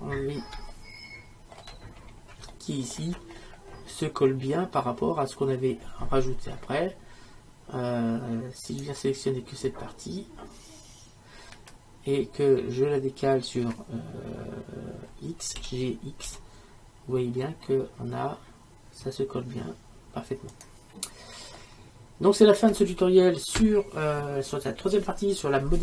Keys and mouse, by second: 8.8-10.5 right drag, 15.6 g, 21.6 middle click, 22.2-25.8 middle drag.